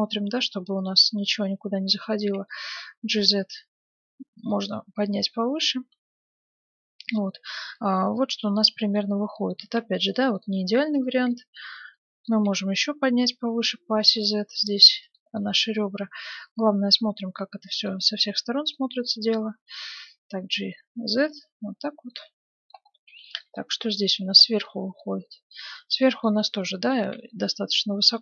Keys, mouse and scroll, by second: 2.4 g, 4.7-6.6 middle drag, 9.6 ctrl+Tab, 12.1-13.6 middle drag, 12.4 g, 13.7-15.0 middle drag, 15.3-17.1 middle drag, 17.9-18.3 scroll down 1, 18.3-20.6 middle drag, 19.5 g, 20.6-20.9 scroll up 1, 20.9 middle click, 21.7-28.2 middle drag, 26.9-28.2 right drag.